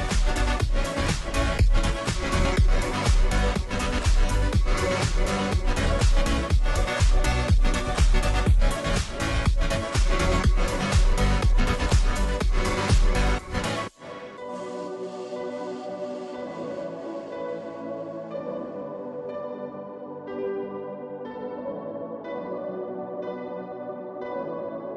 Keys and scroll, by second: 0.0-24.9 typing, 22.8 Return.